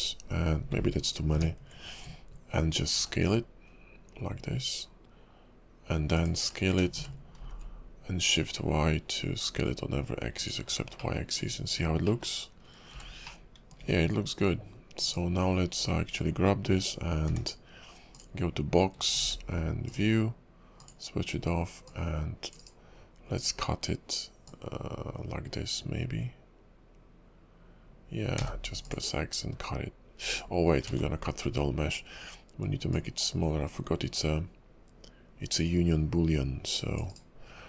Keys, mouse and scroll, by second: 1.3 ctrl+KP_Subtract, 2.9 s, 6.4 s, 10.6-11.0 scroll down 4, 11.0 middle click, 11.3 Tab, 12.0 middle click, 12.9 h, 13.2 middle click, 13.8 `, 15.0 click, 15.5 scroll down 1, 15.7-16.7 scroll up 2, 17.2 d, 19.2 shift+v, 20.7 click, 21.8 click, 24.4 click, 30.3 right click, 30.9 ctrl+z, 31.3 scroll up 2, 32.9 click.